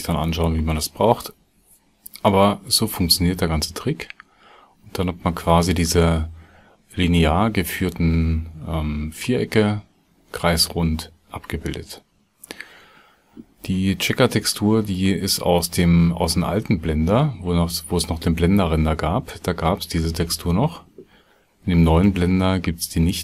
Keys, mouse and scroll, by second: 0.2-0.8 drag.